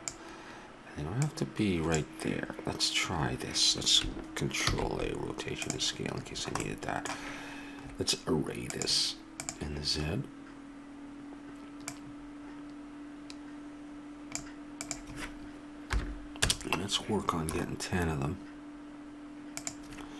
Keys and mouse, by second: 1.3-3.2 drag, 4.7 ctrl+a, 10.3 click, 11.9-17.1 drag, 19.6-20.1 drag.